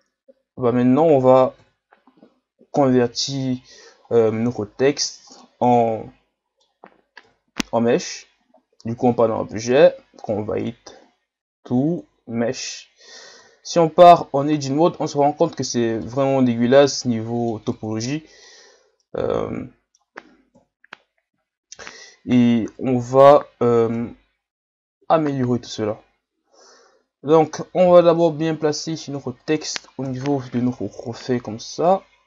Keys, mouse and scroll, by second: 1.6 KP_1, 3.5 scroll up 2, 4.1 scroll down 4, 5.4-7.3 middle drag, 7.3 KP_1, 9.0-13.3 drag, 13.3 Tab, 13.6 scroll up 4, 16.0-20.6 middle drag, 20.6 KP_1, 21.8 Tab, 22.7 KP_Divide, 24.0 KP_1, 25.0 KP_3, 27.8 g, 30.0 KP_1, 30.7-31.5 scroll up 4, 31.5-32.2 scroll up 1.